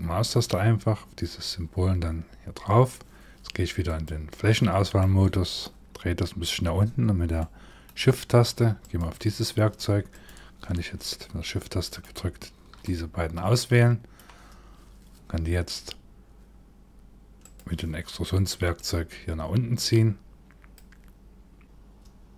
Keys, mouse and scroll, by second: 3.5 click, 4.6 middle click, 5.5-7.0 scroll up 3, 7.0 middle click, 8.4 click, 9.7 click, 11.5 shift+click, 12.4 middle click, 17.0 click, 18.4 click.